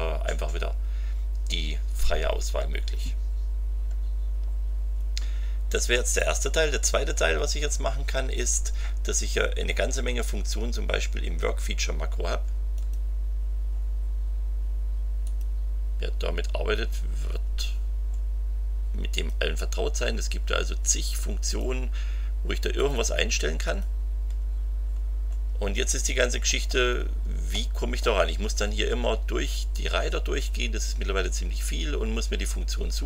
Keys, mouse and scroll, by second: 4.9 scroll down 2, 12.7 click, 15.2 click, 17.7-18.0 scroll down 2, 19.1 click, 20.5-20.8 scroll up 2, 21.4 click, 22.7 click, 23.6 click, 24.4-24.9 scroll down 2, 24.9 scroll up 2, 25.9-26.8 scroll down 1, 27.5 click.